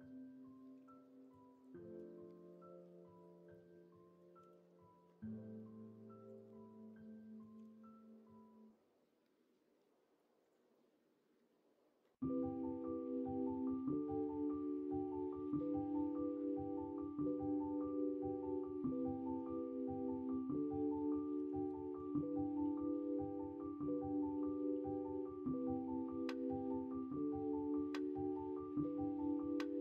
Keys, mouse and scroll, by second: 0.7 3, 2.3 middle click, 3.2 middle click, 3.5 middle click, 4.4 s, 6.5 middle click, 7.5 s, 10.7-12.4 middle drag, 14.7 middle click, 16.0-17.4 middle drag, 19.5-20.9 middle drag, 21.3 KP_1, 21.6 KP_3, 22.0 alt+z, 24.3 middle click, 25.5-26.5 middle drag.